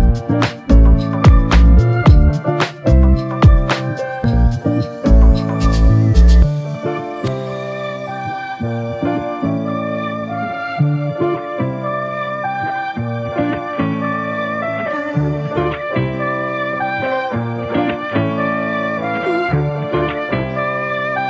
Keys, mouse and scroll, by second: 3.6 ctrl+click, 15.9 shift+click, 17.5 shift+click.